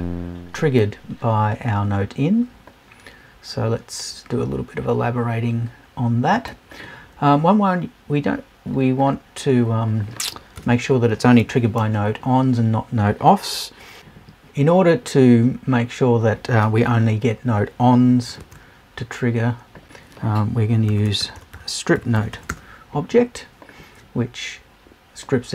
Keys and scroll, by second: 10.6 BackSpace, 11.4 super+BackSpace.